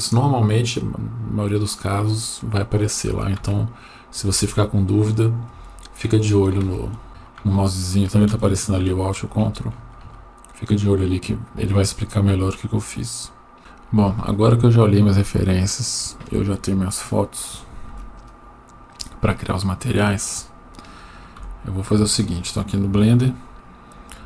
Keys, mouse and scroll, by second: 17.9 Tab, 21.4 Delete.